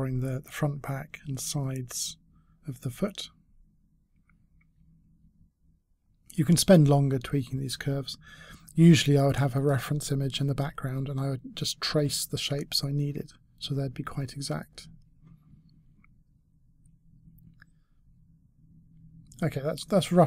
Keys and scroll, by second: 12.8 e.